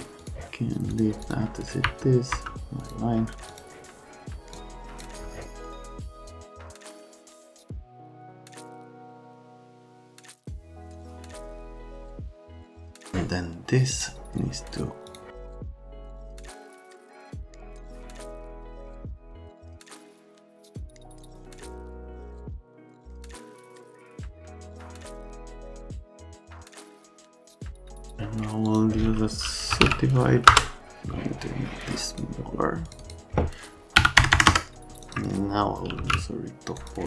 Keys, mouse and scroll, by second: 0.2 click, 0.9 click, 1.2 click, 1.8 F3, 2.3 F3, 2.8 click, 3.5 click, 4.5 click, 5.5 middle click, 5.8 click, 6.5 click, 6.8 right click, 7.6 click, 7.7-8.5 typing, 8.5 click, 8.9 click, 9.8 right click, 10.0 shift+middle click, 11.2 middle click, 11.4 middle click, 11.6 alt+middle click, 11.8 F3, 12.0 alt+middle click, 12.5-13.3 typing, 13.9 click, 15.0 click, 15.4 right click, 15.6 click, 16.2 Delete, 16.3 right click, 16.7 click, 17.0 click, 18.1 ctrl+z, 19.0 click, 19.3 right click, 19.5 click, 19.8 click, 20.0 click, 20.2 right click, 20.4 click, 20.6 click, 20.9 middle click, 21.2-21.6 scroll down 2, 21.3 middle click, 21.4 middle click, 21.9 middle click, 22.1 middle click, 22.2 F3, 22.4 middle click, 22.7 middle click, 22.9 F3, 23.2 F3, 23.6 click, 23.8 middle click, 24.0 middle click, 24.2 ctrl+click, 24.5 middle click, 24.7 F3, 24.8 F3, 24.9 click, 25.2 click, 25.4 right click, 25.6 click, 25.7-26.5 typing, 26.3 click, 26.5 right click, 26.7 F3, 26.7 right click, 26.9 click, 27.0 click, 27.3 click, 27.4 ctrl+a, 27.8 click, 28.6 click, 29.5-30.3 typing, 30.5 Return, 31.0 click, 32.9 click, 33.0 click, 33.9 KP_6, 34.2 KP_0, 34.3 KP_0, 34.4 KP_Enter, 35.0 click, 35.6-36.5 typing, 36.8 click.